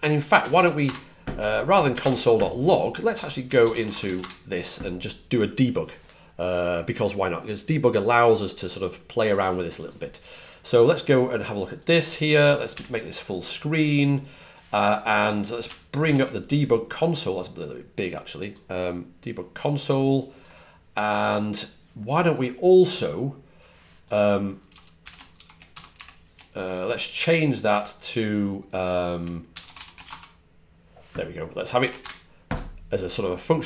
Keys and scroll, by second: 1.8 typing, 3.0-4.4 typing, 12.6 alt+super+f, 15.9 shift+super+y, 25.8 typing.